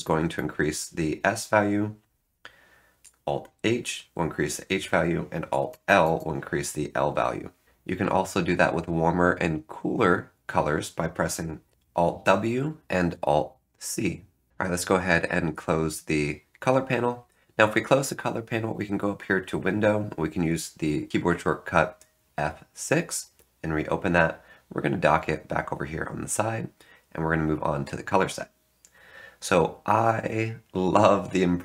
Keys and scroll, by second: 0.0 alt+s, 0.3 alt+s, 3.2 alt+h, 3.5 alt+h, 3.8 alt+h, 4.1 alt+h, 4.2 alt+h, 4.4 alt+h, 4.6 alt+h, 5.6 alt+l, 6.0 alt+l, 6.1 alt+l, 7.6 alt+Tab, 11.7 alt+Tab, 14.5 alt+Return.